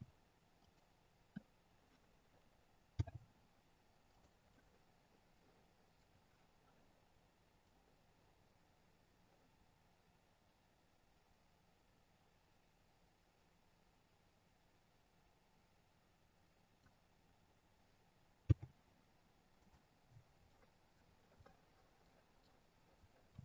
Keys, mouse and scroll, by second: 4.4 middle click, 7.5 click, 17.3-18.4 scroll down 2, 18.4-19.4 scroll down 1, 18.4 g, 19.9-21.3 scroll down 2, 21.3 middle click, 23.2 r.